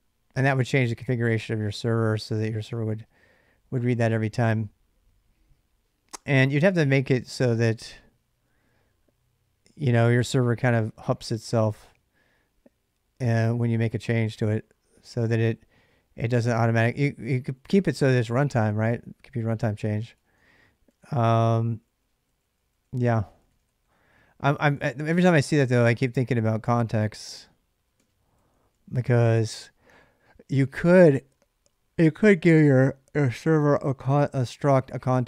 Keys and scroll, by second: 0.0-0.6 typing, 2.4 k, 6.0-7.5 typing, 10.0 j, 14.9 k, 16.8-25.3 typing, 27.1-28.3 typing, 31.4-32.8 typing, 34.9 j, 35.0 j.